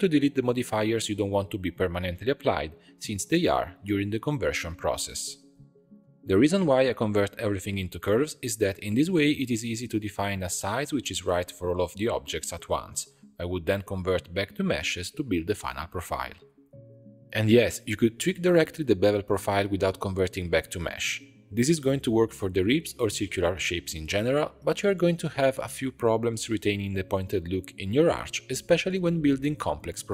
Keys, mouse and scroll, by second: 0.7 click, 2.1-3.5 drag, 3.5-4.8 middle drag, 4.8 click, 5.3 scroll up 1, 5.4-6.5 middle drag, 6.5 shift+b, 8.3 click, 9.3-11.4 shift+drag, 11.4 3, 11.5 alt+click, 11.8 alt+shift+click, 11.9 middle click, 12.2 alt+shift+click, 12.6 middle click, 13.0 alt+e, 13.8 alt+shift+click, 14.0 alt+s, 14.9 alt+e, 16.1-26.8 drag, 28.4 click, 29.8 g, 30.0 g.